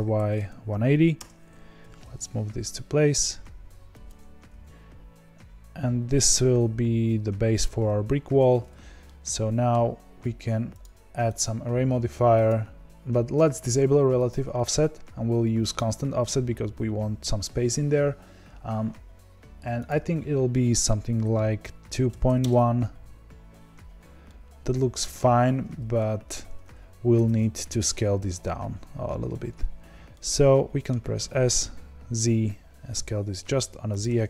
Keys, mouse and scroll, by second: 1.8 g, 4.4 g, 7.9-8.3 scroll down 2, 8.3 Tab, 9.0-9.7 middle drag, 9.7-10.9 scroll down 1, 12.4-24.2 drag, 24.2-27.1 middle drag, 27.1 Tab, 28.1 Tab, 30.1-31.3 middle drag, 31.3 s.